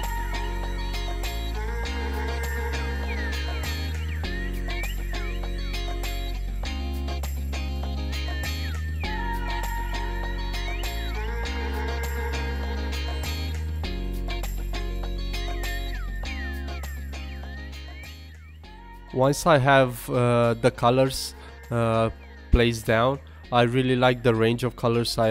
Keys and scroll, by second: 2.1 super+s, 8.5 super+z, 9.8 super+z, 11.4 super+z, 11.8 super+z, 12.4 super+z, 13.7 super+z, 15.5 super+z, 16.0 super+z, 16.5 super+z.